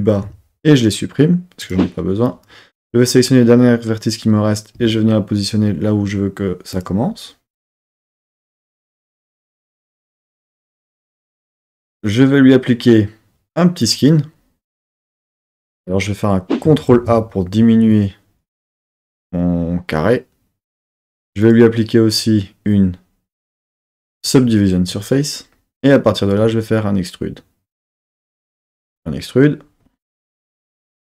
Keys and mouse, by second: 1.0 x, 2.2 click, 4.7 g, 6.7 click, 13.9-15.1 drag, 16.9 ctrl+a, 20.7-21.4 drag, 24.3-28.5 drag, 28.5 e, 28.5 click.